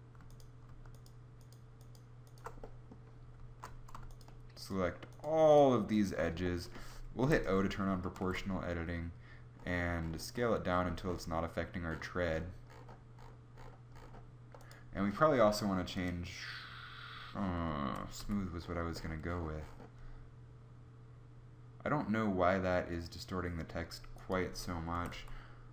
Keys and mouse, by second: 7.2 o, 8.3 s, 18.0 s, 24.9 s, 25.1 s.